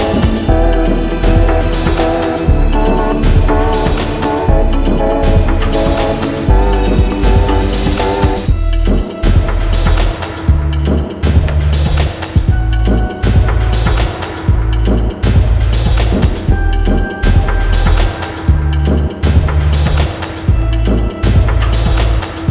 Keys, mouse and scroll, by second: 0.6 click, 1.3-1.8 scroll, 2.6 click, 3.6 click, 4.7 alt+scroll, 5.3-6.0 scroll, 6.3-7.4 scroll, 7.4 middle click, 8.3 click, 9.8 click, 11.6 middle click, 11.6 scroll down 3, 12.4-13.0 scroll down 2, 12.9 middle click, 15.2 click, 16.2 ctrl+c, 16.4 right click, 17.3 click, 18.7 click, 20.1 middle click, 20.6 alt+middle click, 20.9 middle click, 21.0 middle click, 21.7 alt+middle click, 21.9 middle click.